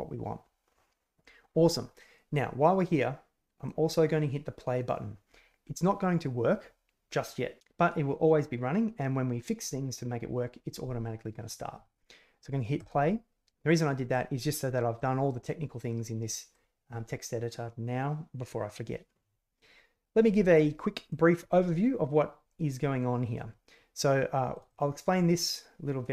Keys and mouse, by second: 2.9 click, 12.7 click, 14.1 click, 14.7 middle click, 16.0 middle click, 21.0-23.3 drag, 24.5 click.